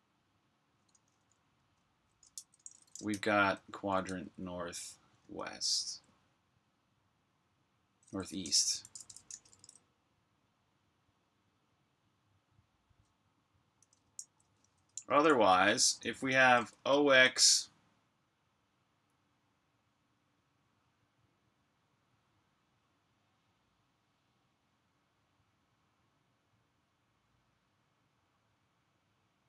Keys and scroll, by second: 1.5-4.0 typing, 5.1 shift+w, 8.1-9.3 typing, 13.7-14.8 typing, 16.0-17.2 typing.